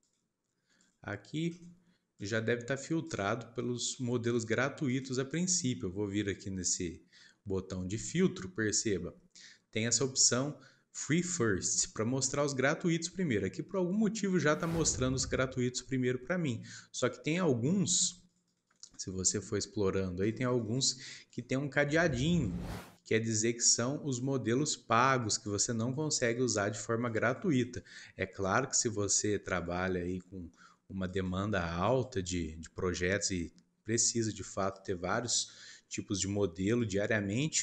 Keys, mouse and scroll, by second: 8.0-11.1 drag, 19.8 scroll down 3.